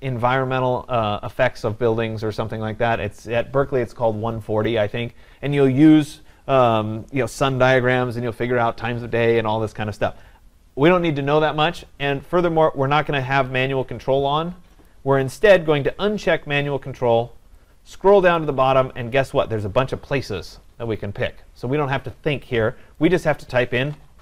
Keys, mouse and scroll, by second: 14.9 click, 18.4 click, 23.1 click.